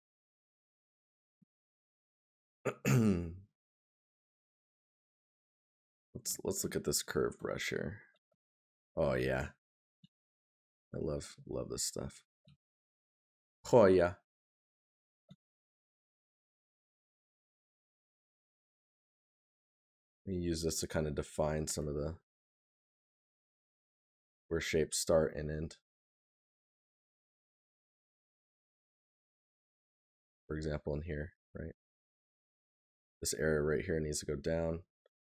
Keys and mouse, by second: 9.4 right click, 12.5 right click, 18.0 right click, 23.6 right click, 28.9 right click, 32.2 right click.